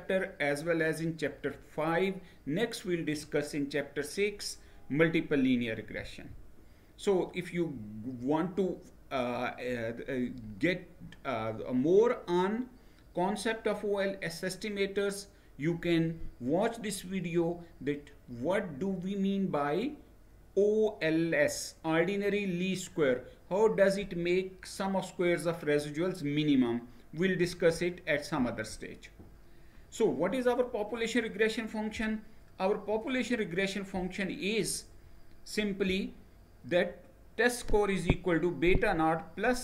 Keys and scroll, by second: 5.6 Down, 27.1 Right, 28.0 Right.